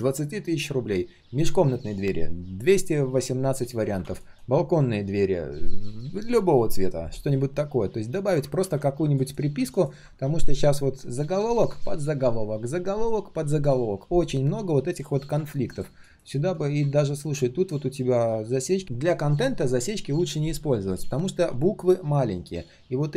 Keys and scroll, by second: 8.6 ctrl+z.